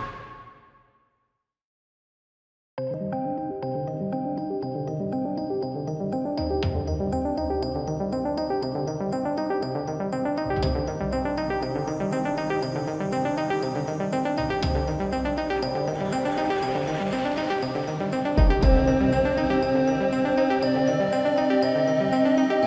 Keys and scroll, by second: 1.9-2.9 typing, 17.9 shift+Tab, 18.6 space.